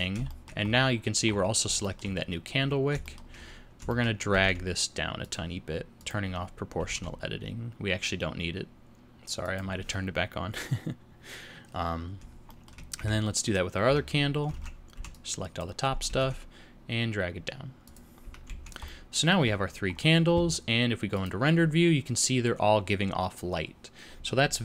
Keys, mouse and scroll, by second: 0.3 shift+middle click, 0.7 scroll up 1, 1.8 shift+middle click, 2.6 scroll down 1, 3.0 shift+middle click, 3.5-3.8 scroll down 1, 3.9 shift+middle click, 4.3 g, 6.0 click, 6.8 g, 12.5 shift+middle click, 13.0 Tab, 13.4 click, 13.9 Tab, 14.6 alt+a, 14.9 b, 16.0 g, 18.5 Tab, 18.5 z, 18.9 middle click, 19.5 scroll down 1, 19.9-21.3 scroll up 2, 21.3 click.